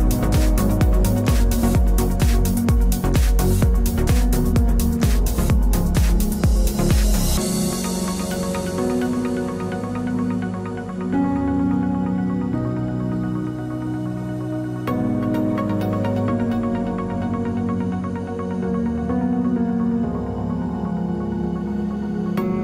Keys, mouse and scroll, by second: 8.6 c, 19.3-20.5 right drag, 20.0 KP_Decimal, 22.1 e.